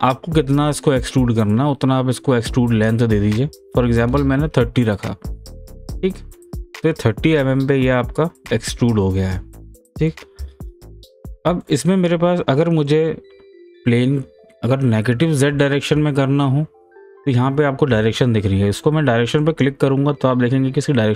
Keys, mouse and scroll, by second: 2.4-5.2 drag, 5.8 click, 6.8 middle click, 8.1 scroll down 1, 8.4 scroll up 1, 9.0-15.1 middle drag, 19.4 click.